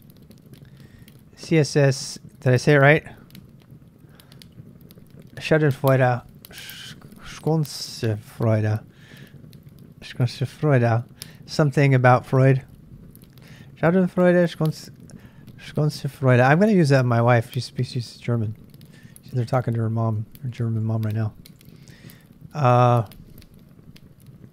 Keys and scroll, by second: 0.0-0.9 typing, 20.2 ctrl+[, 20.3-21.5 typing, 21.6 super+Tab, 24.4 super+Tab.